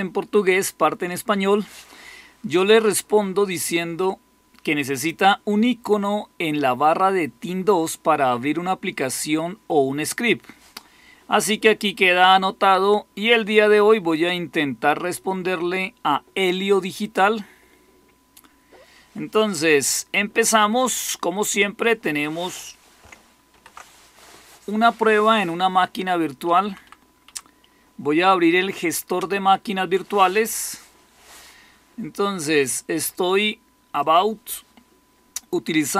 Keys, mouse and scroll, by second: 20.9-23.3 drag, 23.4 alt+super+r, 26.3 Down, 26.5 Down, 26.7 Down, 27.2 Down, 29.1 Return.